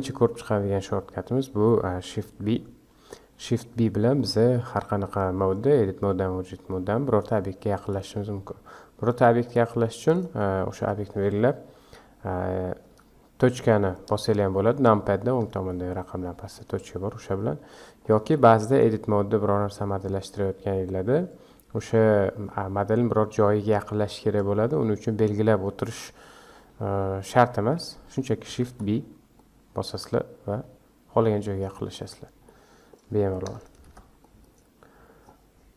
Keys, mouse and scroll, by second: 4.1 scroll up 2, 4.6-7.8 shift+middle drag, 7.8 click, 9.4 click, 10.0 click, 12.8 KP_Decimal, 14.4-15.2 scroll down 10, 15.7-16.2 shift+middle drag, 16.2-16.7 scroll down 5, 16.7-17.2 shift+middle drag, 17.2 scroll down 2, 17.7-19.4 middle drag, 19.4-20.3 scroll up 1, 20.3-23.4 middle drag, 28.4 shift+b, 31.8-32.4 scroll down 5, 32.4-33.8 middle drag, 33.8 shift+b, 35.2 scroll down 3.